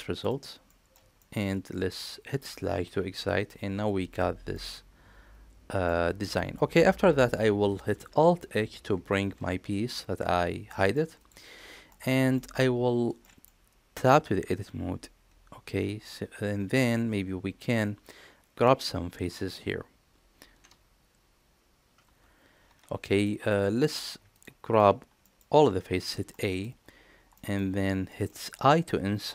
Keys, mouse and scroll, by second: 0.5 middle click, 1.0 shift+middle click, 2.7 KP_Divide, 4.4-5.7 middle drag, 6.4 middle click, 9.1 alt+h, 10.5 middle drag, 11.0 click, 11.7 middle click, 12.2 shift+middle drag, 13.1 middle click, 13.8 Tab, 23.1 middle click, 23.5 click, 24.1 shift+click, 25.0 middle click, 25.9 a, 26.1 middle click, 27.2 middle click, 27.9 shift+middle click.